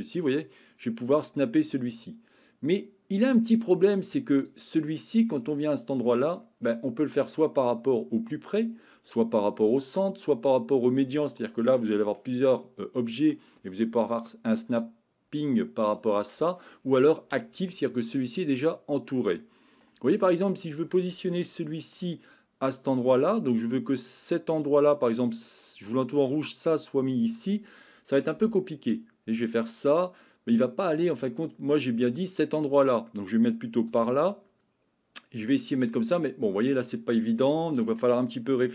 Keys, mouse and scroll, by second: 4.3 click, 5.8-17.8 drag, 19.5 middle click, 21.7 shift+middle click, 28.4 g, 33.9 g, 36.0 click, 36.6-37.2 middle drag, 37.7 shift+middle click.